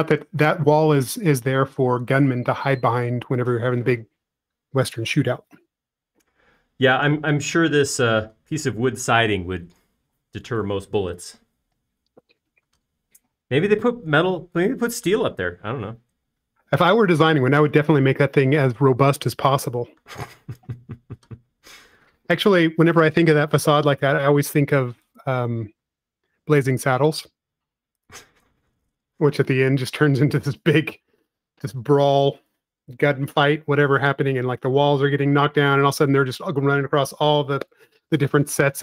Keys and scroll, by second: 22.8 |, 29.9 space, 34.2 m.